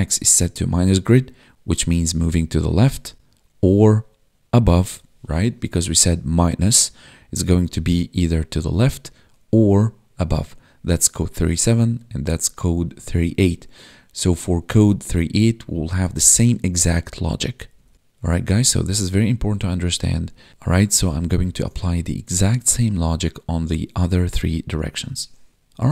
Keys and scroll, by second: 6.0 Tab, 20.5 ctrl+Up, 20.8 ctrl+Down.